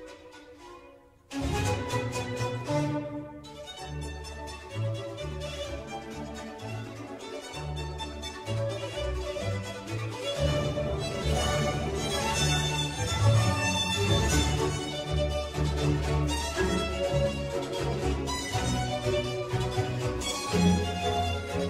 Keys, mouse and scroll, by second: 0.8 click, 2.1-3.0 drag, 5.4 click, 6.2 click, 7.0 scroll down 1, 7.7-9.8 scroll down 5, 9.8-12.8 drag, 13.4-16.6 drag, 18.9 click, 19.2-21.6 middle drag.